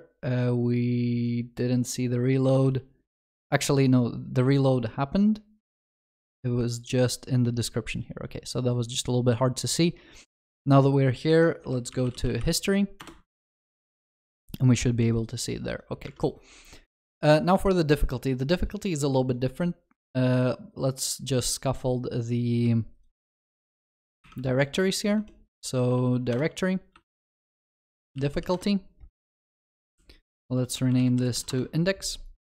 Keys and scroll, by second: 24.3 alt+Insert, 29.8 shift+F6.